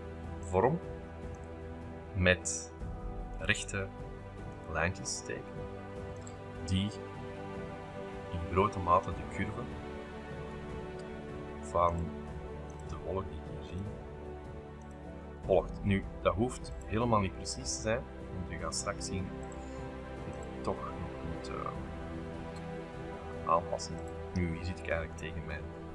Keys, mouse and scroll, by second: 0.4-1.5 drag, 3.3 click, 4.5 click, 6.1 click, 8.6-10.0 scroll up 3, 10.5 middle click, 10.6-11.5 scroll up 4, 10.7 middle click, 11.8-13.4 drag, 13.7 click, 14.8 click, 15.6 shift+middle click, 16.1 scroll up 2, 16.7 shift+click, 17.5 click, 19.4 click, 20.3 click, 20.8-21.6 scroll up 4, 20.9 shift+middle click, 21.4 shift+middle click, 21.6 middle click, 24.0 click, 24.4-25.8 scroll up 8, 24.6 middle click, 24.7 middle click, 25.2 shift+middle click.